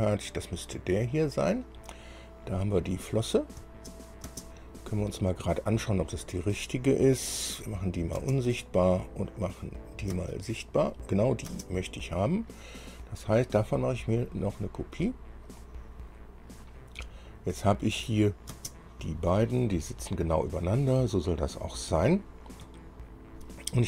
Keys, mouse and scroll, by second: 1.4 click, 3.1 click, 3.8 space, 4.5 space, 7.1-7.5 scroll down 2, 8.0 click, 8.4 space, 10.0 click, 10.3 space, 11.7 space, 15.7 click, 17.3-17.6 scroll down 1, 18.2 click, 18.7 space, 21.4 click, 23.0 shift+click.